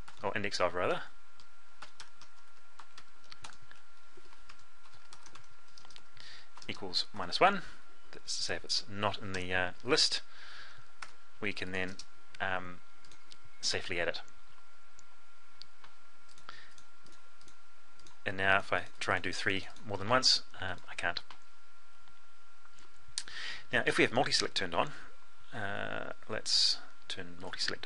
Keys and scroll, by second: 22.8 F12.